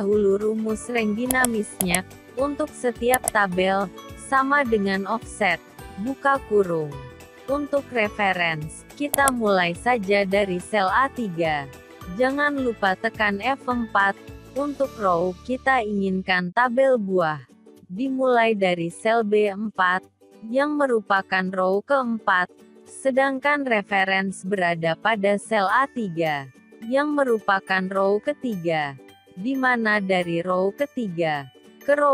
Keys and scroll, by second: 10.8 F4.